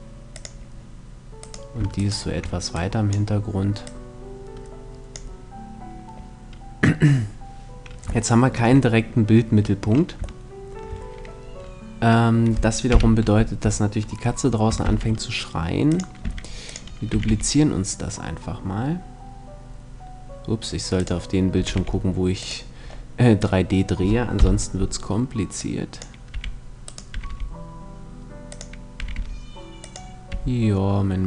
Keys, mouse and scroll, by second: 0.1-1.9 drag, 1.1-3.5 right drag, 2.4-6.3 drag, 7.9 middle click, 8.1 middle click, 8.3-9.9 middle drag, 10.1 middle click, 10.3 middle click, 12.5 KP_7, 14.5 shift+d, 15.6-18.0 drag, 15.9 r, 16.7 r, 20.7-24.0 drag, 21.2 r, 24.0 middle click, 24.0 KP_1, 25.2-27.1 drag, 26.0 r, 26.7 r, 28.2-31.2 drag, 28.7 r, 29.9 r.